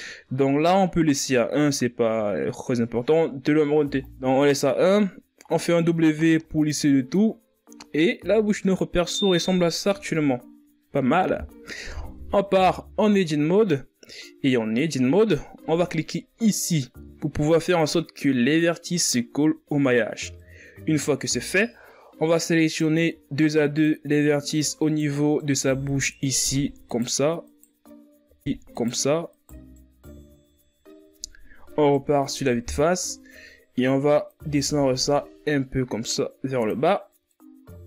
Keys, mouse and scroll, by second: 0.2-2.1 scroll up 1, 2.1-2.4 scroll up 1, 6.6-8.3 drag, 8.3 w, 10.2-10.9 scroll down 6, 10.9-12.4 scroll up 7, 12.4 KP_3, 13.8 KP_1, 14.7 Tab, 16.6-19.7 scroll up 1, 20.2 click, 22.5 scroll up 2, 22.7 scroll down 2, 23.0-24.0 middle drag, 24.0-25.2 scroll up 2, 25.2 right click, 26.2 shift+right click, 27.3 shift+right click, 28.4 shift+right click, 29.4 shift+right click, 30.0 shift+right click, 31.0-32.3 shift+scroll up 4, 32.6 KP_1, 33.8-35.0 shift+scroll down 4, 35.0-37.8 drag.